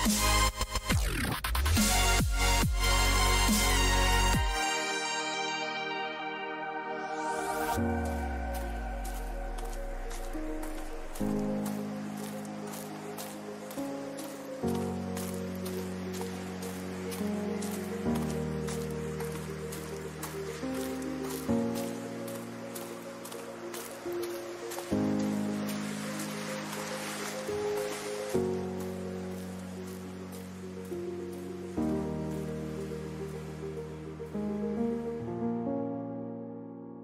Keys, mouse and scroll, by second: 7.0 k, 35.9-37.0 middle drag.